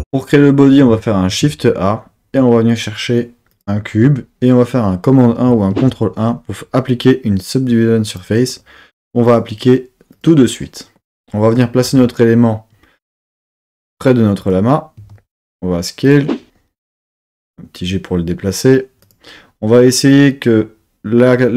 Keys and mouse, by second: 1.3 shift+a, 5.7 super+1, 8.1 click, 9.3-10.2 drag, 11.8 g, 14.4 click, 16.0 click, 17.0 g, 19.0 click.